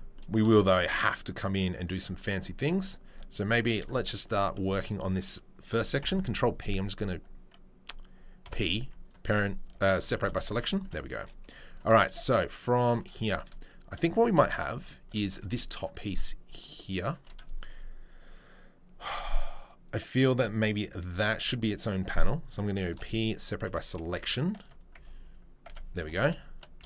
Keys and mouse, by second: 3.6 Tab, 3.6 right click, 3.7-10.0 shift+middle drag, 6.0 ctrl+p, 8.4 p, 9.6 Tab, 10.0 shift+click, 10.2-11.7 middle drag, 10.4 Tab, 12.1 shift+middle click, 12.3 shift+right click, 12.4 shift+middle click, 12.7 shift+right click, 12.8-14.3 shift+middle drag, 14.5 shift+middle click, 15.5 shift+middle click, 15.7 shift+right click, 15.8 shift+middle click, 16.1 shift+right click, 16.6 shift+middle click, 17.0 shift+right click, 20.6 shift+middle click, 21.1 shift+d, 22.9-24.7 middle drag, 22.9 p, 23.7 Tab, 24.0 2, 24.6 Tab, 24.7 right click, 24.8 middle click, 25.0 Tab, 25.2 right click, 25.3 middle click, 26.0 2, 26.2 shift+right click, 26.8 alt+click.